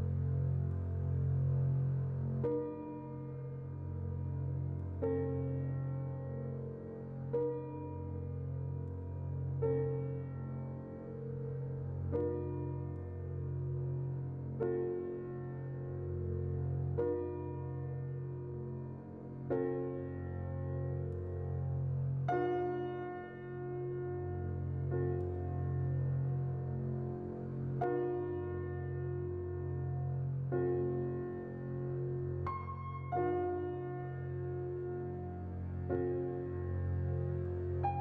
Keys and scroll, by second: 11.8 z, 15.4 a, 19.8 z, 20.7 Delete, 23.1 z, 27.3 z, 28.3 a, 31.9 z, 33.0 Delete.